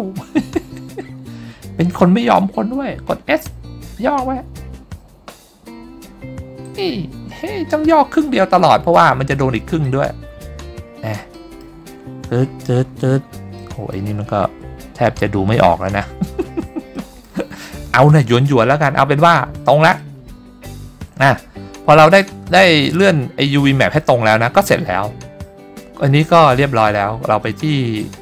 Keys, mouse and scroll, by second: 4.3 s, 6.9 click, 8.1 scroll up 1, 8.4 scroll down 2, 9.4 middle click, 10.0 middle click, 10.7-11.0 scroll up 2, 11.5 middle click, 12.2-13.4 scroll up 4, 13.7 middle click, 14.5 scroll up 1, 15.9 scroll down 2, 17.1 middle click, 19.3-19.9 scroll up 3, 20.1 middle click, 23.0 scroll down 1.